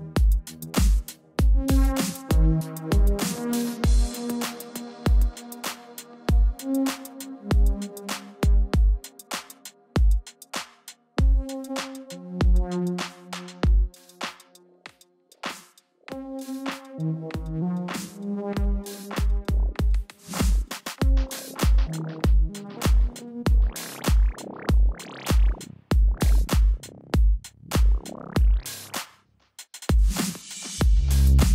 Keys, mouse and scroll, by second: 0.9 -, 0.9 click, 5.5 click, 16.4 click, 18.7 scroll down 1, 18.9-19.3 scroll up 1, 19.3 click, 23.3 alt+click, 25.0 click, 27.9-29.3 typing, 28.9 click, 30.0 ctrl+t, 30.7 click, 31.1 click.